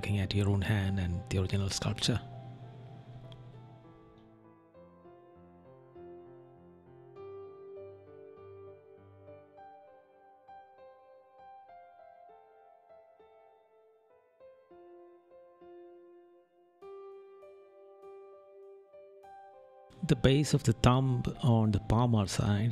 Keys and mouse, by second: 0.8 right click, 1.6 right click, 2.1 right click, 3.5 right click, 4.0 right click, 4.5 right click, 5.4 right click, 7.7 right click, 9.8 right click, 12.2 right click, 12.7 right click, 14.7 right click, 16.3 right click, 17.9 right click, 19.1 right click, 22.3 right click.